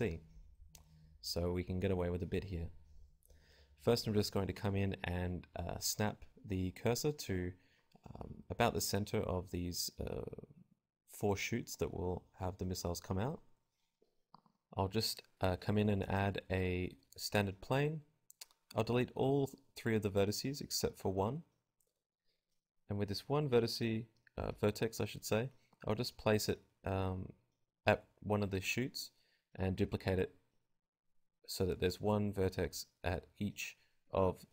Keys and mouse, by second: 10.6-11.6 right drag, 10.8 shift+s, 11.9 Tab, 11.9-13.1 right drag, 12.3 shift+a, 15.3 click, 16.2-18.0 typing, 16.7-20.0 drag, 17.0 Tab, 20.2-21.2 drag, 20.4-26.5 typing, 21.4 click, 23.0 click, 23.5 click, 25.2 click, 25.4 right click, 25.7 Tab, 26.1 click, 26.7-28.2 drag, 29.8-31.5 drag, 31.7 middle click, 32.4 i.